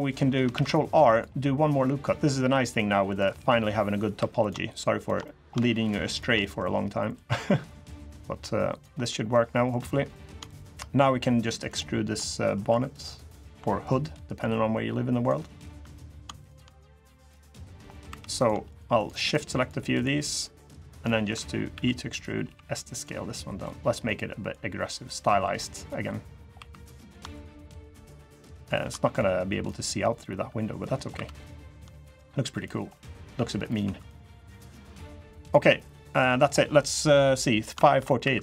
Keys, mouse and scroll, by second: 0.3 ctrl+r, 3.1 scroll up 2, 3.5 middle click, 3.9 3, 4.1 click, 4.4 shift+click, 4.7 shift+click, 5.0 middle click, 5.6 shift+click, 5.8 shift+click, 6.1 middle click, 6.9 click, 8.8 middle click, 9.3 middle click, 9.9 click, 10.2 shift+click, 11.3 shift+click, 12.0 middle click, 12.4 2, 13.2 click, 13.4 middle click, 14.1 click, 15.8 click, 16.1 shift+click, 16.8 click, 17.7 middle click, 17.8 3, 18.1 click, 18.4 click, 18.7 shift+click, 19.0 shift+click, 19.3 click, 19.7 shift+click, 20.0 click, 20.4 shift+click, 20.8 middle click, 21.5 e, 22.2 s, 23.1 middle click, 24.2 click, 25.8 middle click, 26.3 3, 26.7 click, 27.1 shift+click, 27.5 click, 27.9 shift+click, 28.4 shift+click, 28.9 click, 29.6 middle click, 30.5 middle click, 30.9 2, 31.1 click, 31.8 click, 32.7 middle click, 33.6 2, 33.7 click, 34.3 click, 35.5 middle click, 36.1-36.6 scroll down 1, 37.5 shift+middle click, 37.8 middle click, 38.0 3, 38.2 click.